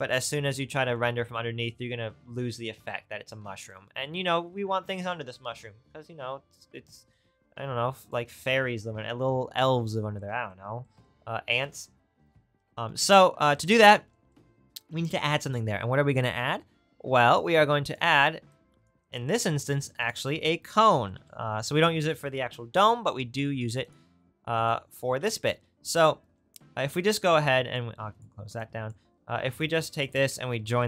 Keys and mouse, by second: 19.1-24.6 shift+right drag, 19.5 shift+a, 27.5 click, 28.6 click, 29.3 shift+a.